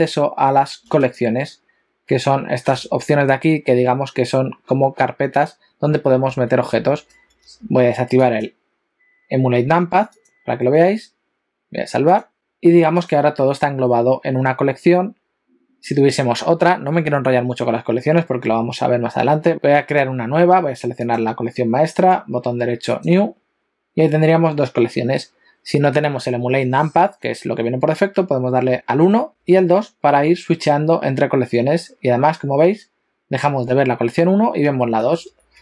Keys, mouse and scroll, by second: 7.5 F4, 13.1 click, 19.5 click, 19.5 right click, 21.0 click, 22.0 right click, 28.5 1, 29.3 2, 34.7-35.6 typing.